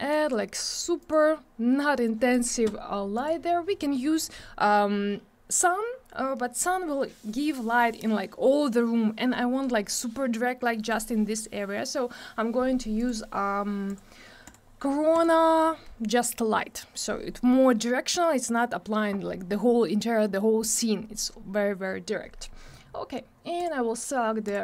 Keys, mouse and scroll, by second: 0.1 click, 1.0 click, 2.0 click, 3.1 click, 13.0 click, 13.9 click, 14.4 click, 15.1 click, 23.6 click, 24.4 click.